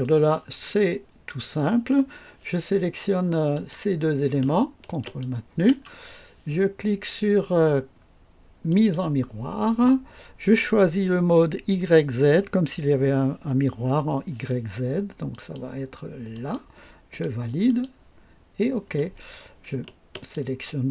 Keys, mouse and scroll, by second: 3.5 click, 5.0 ctrl+click, 8.7 click, 15.3 click, 16.3 click, 17.1 click, 17.6 click, 20.1 ctrl+click.